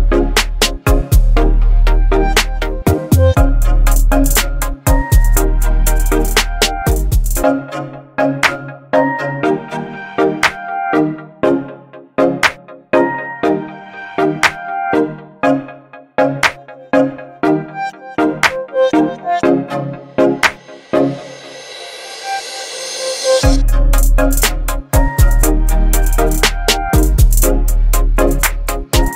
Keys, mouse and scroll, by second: 0.9-1.5 drag, 10.0 click, 11.5 alt+scroll up 1, 12.2 space, 12.4-13.0 click, 12.8 space, 13.9-16.6 alt+right drag, 21.4 alt+right click, 21.4 click, 23.0 v, 23.5 ctrl+t, 25.7 click, 26.4 right click, 27.3 click, 28.6 v, 28.9 ctrl+t.